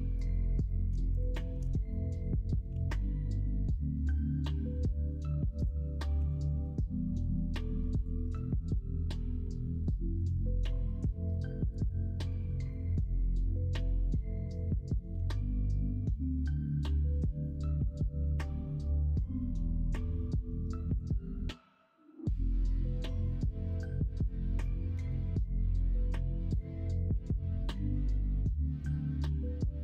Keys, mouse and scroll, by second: 0.0 middle click, 1.6 middle click, 5.5 e, 6.1 3, 12.1 scroll up 1, 12.2 middle click, 12.7-13.3 scroll down 1, 13.3 l, 15.1 s, 17.9 middle click, 20.2 shift+middle click, 25.8 middle click.